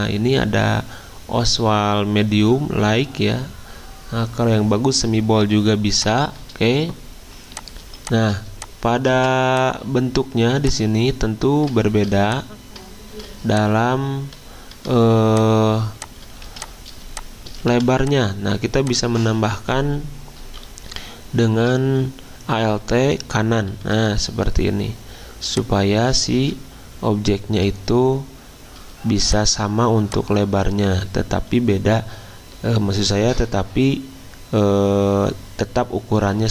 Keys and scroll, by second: 0.0 typing, 7.8 z, 9.1 v, 16.4 z, 17.7 v, 20.6 alt+Right, 20.9 alt+Right, 22.8 alt+Right, 23.8 alt+Left, 26.6 alt+Right, 27.2 alt+Right.